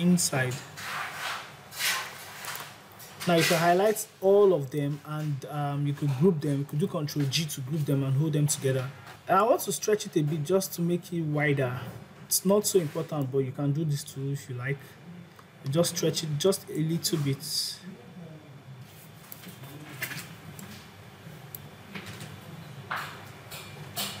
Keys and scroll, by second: 6.5 ctrl+c.